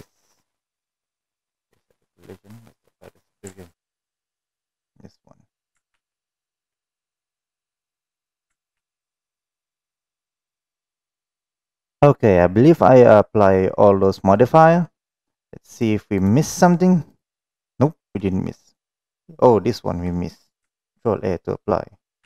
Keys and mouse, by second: 2.8 click, 5.2 click, 5.6 ctrl+a, 6.4 ctrl+a, 7.4 click, 8.5 ctrl+a, 9.7 click, 10.5 click, 11.1 click, 13.2-13.8 middle drag, 14.1 middle drag, 16.0 click, 16.3 click, 17.4-18.3 middle drag, 18.5 click, 22.1 ctrl+a.